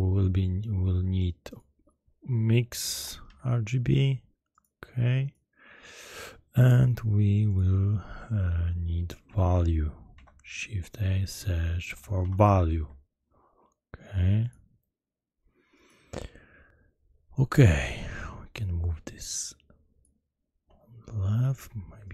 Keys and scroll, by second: 2.9 i, 3.2 x, 10.1 shift+a, 11.8 v, 12.1 a, 12.4 l, 12.7 u.